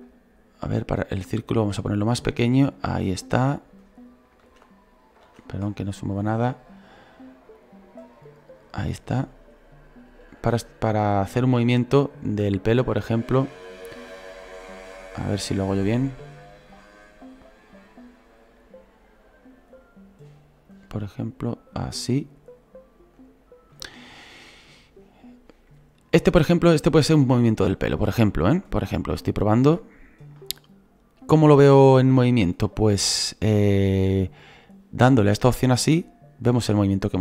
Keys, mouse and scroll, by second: 3.4-4.4 drag, 4.4 ctrl+z, 5.2 ctrl+z, 6.2 scroll up 3, 7.5-12.4 drag, 13.9 click, 14.8 ctrl+z, 17.2-20.2 drag, 21.2-37.2 drag.